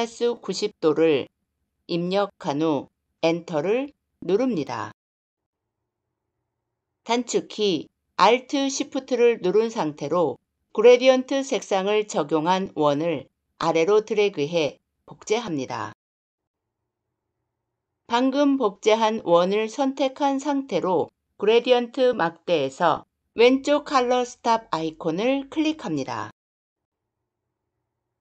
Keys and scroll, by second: 3.0 Return.